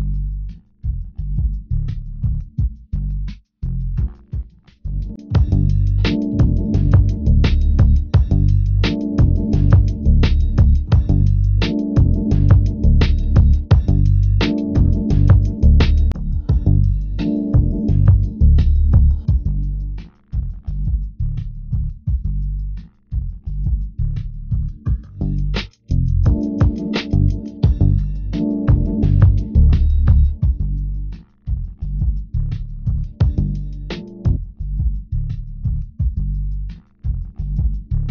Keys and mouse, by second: 0.7 click, 2.0 click, 8.1-9.2 drag, 21.6 Tab, 24.1 middle click, 34.1 e.